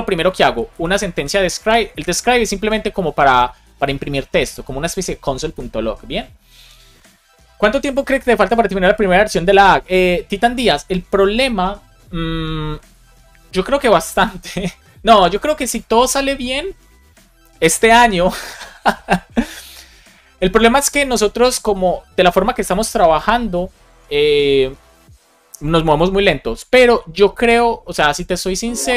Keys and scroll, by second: 0.3 Right, 1.2-4.0 typing, 4.4 Return.